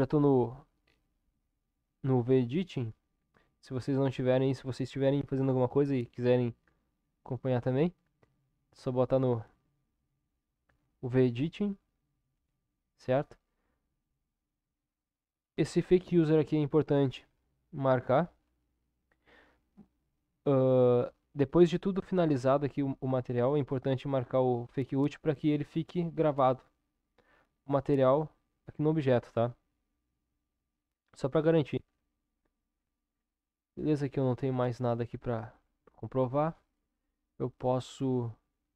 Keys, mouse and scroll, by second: 0.0-3.2 drag.